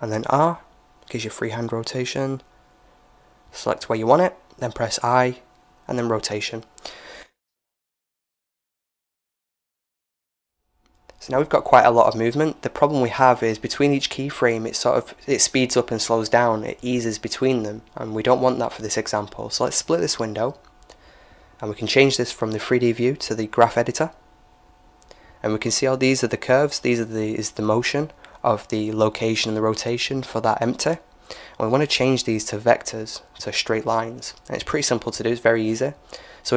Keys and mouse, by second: 4.4 i, 6.5-8.1 drag, 17.1-18.9 drag, 19.2-20.9 drag, 24.3 click, 25.5-29.8 middle drag, 32.7-36.3 drag.